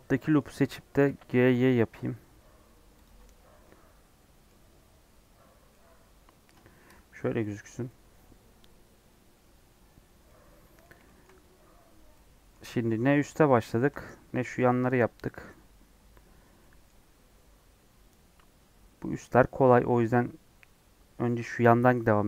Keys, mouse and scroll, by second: 0.5 scroll up 1, 0.9 g, 3.1 Tab, 3.3 scroll down 2, 3.6 middle click, 4.6 Tab, 4.7 scroll up 1, 5.2-5.7 scroll down 5, 5.2 Tab, 5.7-7.0 middle drag, 7.0 scroll down 3, 7.3-8.3 middle drag, 8.3-9.2 scroll down 1, 9.2-9.9 scroll down 1, 9.9-10.2 scroll down 2, 10.2-20.5 middle drag, 20.5-21.0 scroll up 5, 21.1 scroll down 2.